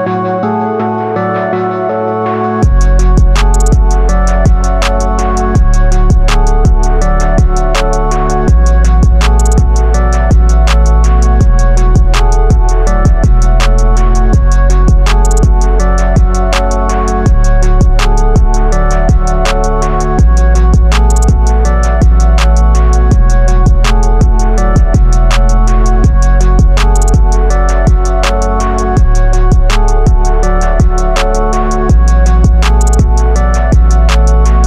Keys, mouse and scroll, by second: 0.1-2.3 drag, 9.3 right click, 11.7 super+=, 13.0 super+-, 17.6 =, 20.0 super+-, 22.3-23.6 drag, 24.2 Up, 25.8 Up, 27.4 Up, 28.2-29.2 drag, 29.7-30.6 scroll down 1, 34.4 scroll down 1.